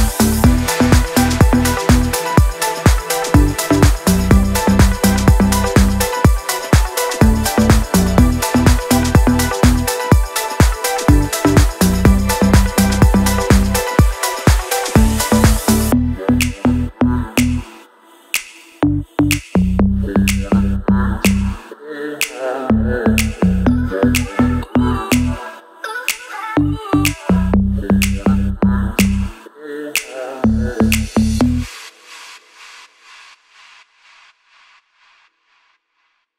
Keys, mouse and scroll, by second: 4.3 ctrl+c, 4.9 click, 5.9 ctrl+v, 7.1 click, 12.4 ctrl+z, 13.1 ctrl+shift+a, 14.3 click, 16.4 ctrl+z, 16.8 ctrl+a, 18.4 click, 20.2 ctrl+d, 20.8 click, 22.3 Up, 24.4 Down, 24.8 click, 25.1-25.6 scroll down 1, 25.6 click, 26.5-27.2 scroll up 1, 27.8 click, 33.6 click, 33.7-34.7 scroll down 1.